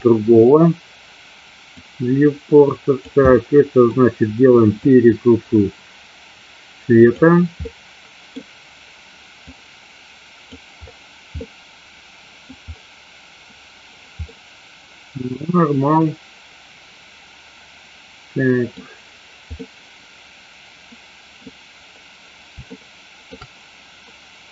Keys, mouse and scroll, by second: 1.9-3.2 drag, 3.4 middle click, 4.9-7.1 drag, 7.8-8.5 middle drag, 9.4-10.5 drag, 11.4-12.5 middle drag, 14.4-18.8 middle drag, 19.6-21.4 middle drag, 22.9-23.4 shift+middle drag.